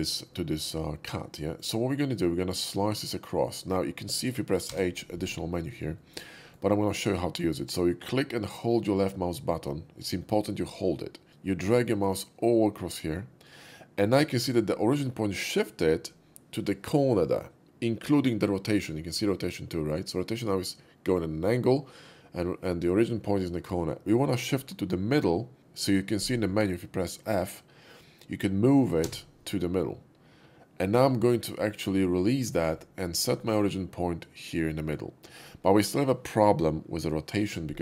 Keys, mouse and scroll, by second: 0.3-1.6 middle drag, 4.7 h, 5.9 shift+middle click, 6.4 shift+middle click, 8.5-32.6 shift+drag, 19.9 typing, 28.8 f, 33.4-35.4 middle drag.